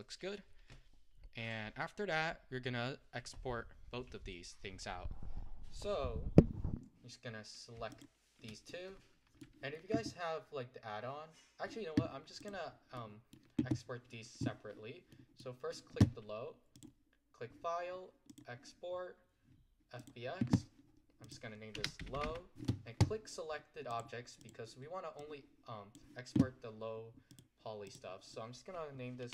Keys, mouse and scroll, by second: 1.5 click, 8.1 shift+click, 8.7-11.8 middle drag, 12.5 click, 13.1-20.4 middle drag, 20.4-25.3 drag.